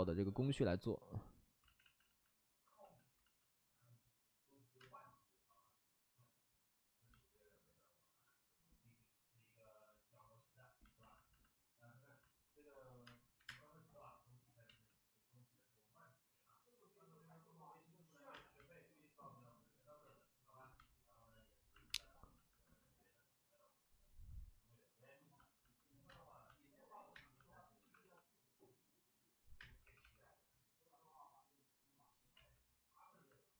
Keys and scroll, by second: 1.6 ctrl+z, 2.0 ctrl+z, 2.7 x, 3.1 ctrl+z, 4.7 space, 5.2 space, 5.4 space, 13.0 space, 13.3 1, 13.4 space, 14.6 ctrl+z, 18.3 space, 26.0 space, 27.1 space, 27.7 shift+d, 27.9 shift+d, 29.5 space, 29.8 3, 29.9 3, 32.3 ctrl+z.